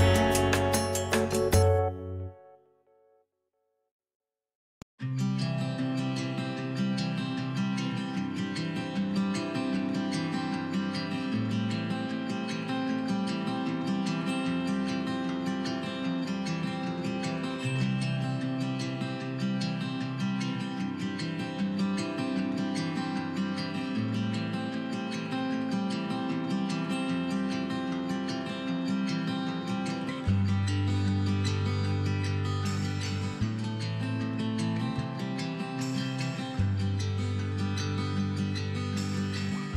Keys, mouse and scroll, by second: 0.1-0.4 scroll down 1, 1.3 g, 2.9 click, 3.0-6.7 middle drag, 4.2 scroll down 1, 5.5 scroll up 1, 6.7 click, 6.9-9.7 middle drag, 7.8 scroll up 2, 8.8-9.5 scroll up 2, 9.5 scroll up 1, 9.7 click, 10.2 click, 10.5 click, 10.7 shift+click, 11.1 middle click, 11.5 shift+click, 11.7 shift+click, 12.2-12.5 shift+drag, 12.6 shift+click, 12.9 click, 13.2 scroll down 1, 13.6 scroll up 1, 13.9-18.9 middle drag, 14.6 x, 18.9 click, 19.5 alt+click, 20.0-22.2 middle drag, 22.2 shift+click, 22.8-23.1 shift+drag, 23.4 shift+click, 23.7-24.5 shift+drag, 24.5 f, 24.9-25.9 middle drag, 25.9 click, 26.8 i, 28.2 click, 29.0 g, 31.5 click, 32.7 s, 35.9 right click, 36.1 scroll down 1, 36.3 scroll up 1, 36.3-37.9 middle drag, 36.9 KP_1, 37.7 scroll up 2, 37.9 click, 38.1-38.4 scroll down 2, 38.4-38.7 scroll up 2, 38.7 shift+middle click, 39.0-39.6 scroll up 2, 39.6 click.